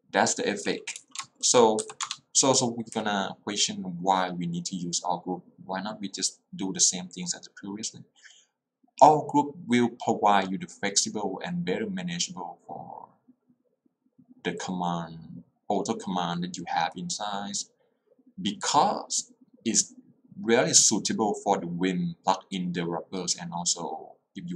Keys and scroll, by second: 1.1 Escape, 1.9 q, 2.1 Return.